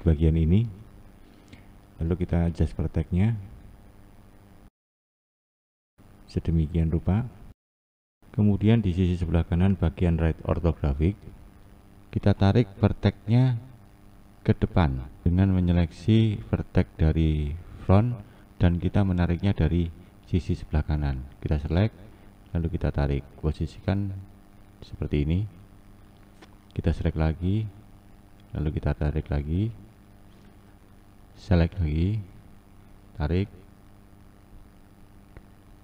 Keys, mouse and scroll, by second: 0.5 click, 1.2 click, 3.2 click, 4.5 click, 5.3 click, 6.4-8.5 scroll down 3, 12.3 scroll down 1, 12.6-15.3 scroll up 2, 15.3-15.9 scroll up 1, 15.9-17.0 drag, 17.0-19.2 scroll up 4, 19.2-19.8 scroll up 1, 19.8-20.7 scroll up 1, 20.7-21.2 scroll up 1, 21.2 click, 22.5 click, 26.7 click, 28.3 click, 31.3 click, 32.6 click.